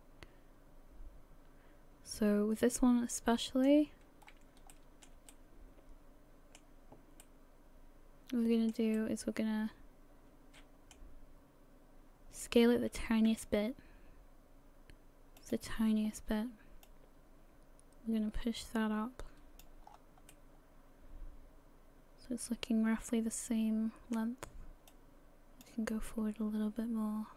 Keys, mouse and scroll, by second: 4.2 scroll up 2, 4.7 shift+middle click, 5.3 middle click, 7.2 middle click, 7.3 middle click, 7.4 shift+middle click, 13.3 s, 16.8 click, 19.6 click, 19.9-20.3 scroll down 6, 20.3 middle click, 24.9 click, 26.0 middle click.